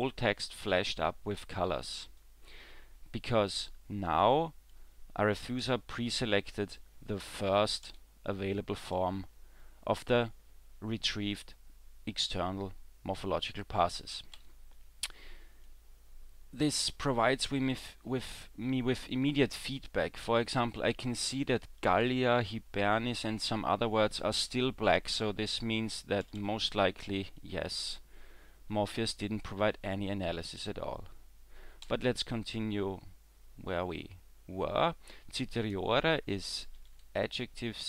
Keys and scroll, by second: 7.9 w, 14.4 e, 26.2 w, 26.5 w, 31.9 e.